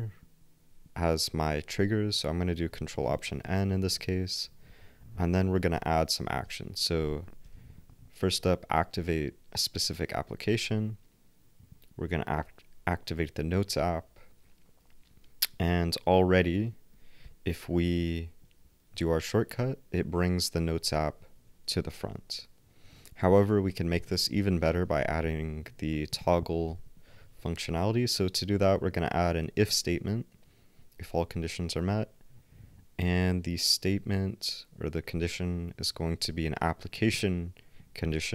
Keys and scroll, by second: 5.5 shift+super+f, 17.2 ctrl+alt+n, 22.1 ctrl+alt+w, 24.6 shift+super+f.